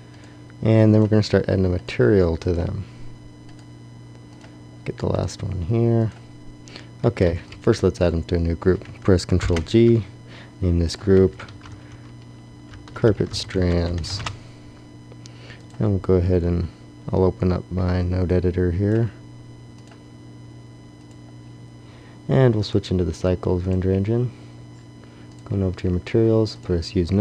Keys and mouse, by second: 6.9 click, 6.9 a, 7.2 b, 9.3 ctrl+g, 17.2 click, 18.5-27.2 drag.